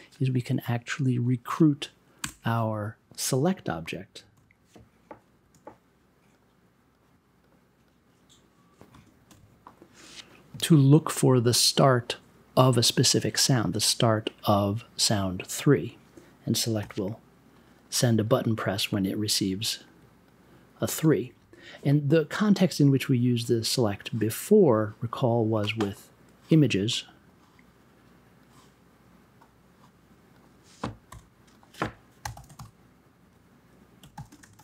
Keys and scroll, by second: 2.2 BackSpace, 3.1 n, 3.9 s, 8.9 space, 9.1 3, 15.2 b, 26.6-30.2 typing, 30.6 super+j.